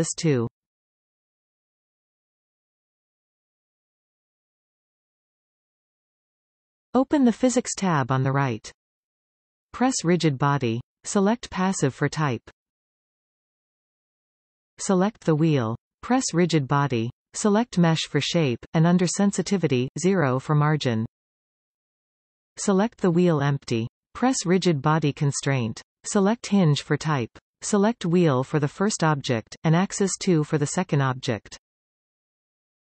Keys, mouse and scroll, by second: 2.7 Return, 4.0-7.3 scroll up 2, 9.3 click, 10.4-14.8 drag, 16.3 click, 17.5-20.4 drag, 20.8-25.6 drag, 21.9 Return, 26.4 click, 27.3-29.4 drag, 31.1 click.